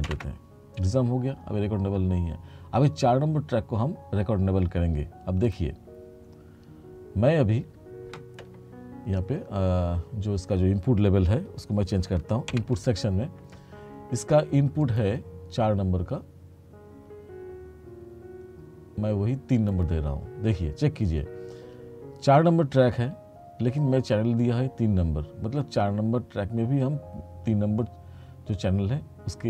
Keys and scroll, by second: 0.2 shift+r, 12.6 ctrl+=.